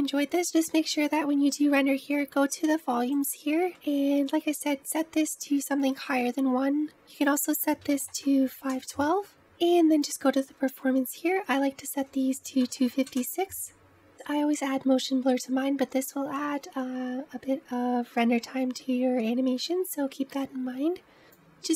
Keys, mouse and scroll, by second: 1.3-9.4 drag, 9.9-21.7 drag.